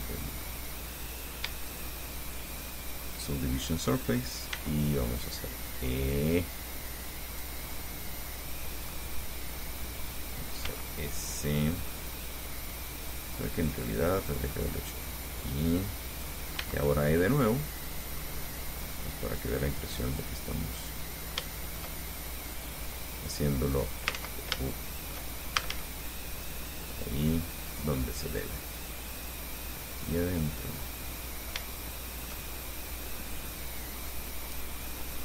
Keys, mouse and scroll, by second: 0.2 click, 1.3 right click, 1.9 shift+right click, 2.7 shift+right click, 4.7 e, 7.5 click, 8.0-9.3 middle drag, 10.9 s, 13.3 click, 14.2-16.7 drag, 16.8 e, 18.2 click, 18.4 middle click, 21.2-22.9 middle drag, 23.5 click, 24.4 ctrl+z, 24.8 ctrl+shift+click, 25.0 shift+middle click, 25.8 shift+a, 27.2-28.8 drag, 29.4-30.5 drag, 30.8-35.0 middle drag, 35.0 scroll up 2.